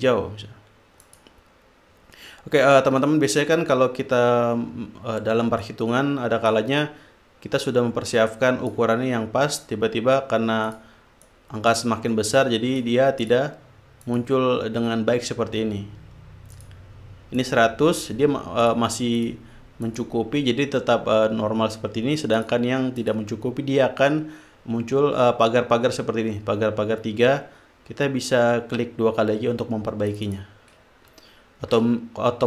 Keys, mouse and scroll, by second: 1.4 click, 6.0 click, 8.0-9.4 drag, 11.0 click, 11.6 click, 12.6-13.9 drag, 14.4 click, 16.9 click, 17.8 click, 19.0 click, 19.6 click, 20.2 click, 22.7 click, 23.4 click, 30.4-31.1 drag, 32.0 ctrl+z.